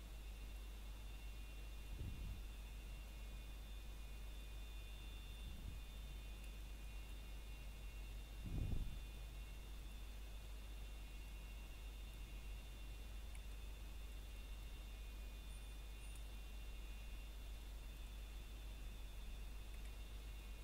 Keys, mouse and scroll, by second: 1.1 scroll down 1, 1.5 middle click, 1.9-2.8 scroll up 1, 2.8 middle click, 3.0 scroll up 1, 3.8 middle click, 5.0 scroll up 1, 5.0 middle click, 6.4-6.9 scroll down 1, 6.9 middle click, 7.6 scroll up 1, 8.3 middle click, 8.7-9.0 scroll up 1, 9.1 shift+middle click, 9.4 scroll up 1, 10.0 middle click, 11.2 scroll down 1, 11.5 middle click, 11.9 scroll up 1, 14.7 middle click, 16.9 scroll up 1, 17.9 middle click, 18.2 scroll up 1, 19.0 middle click, 20.3 alt+click.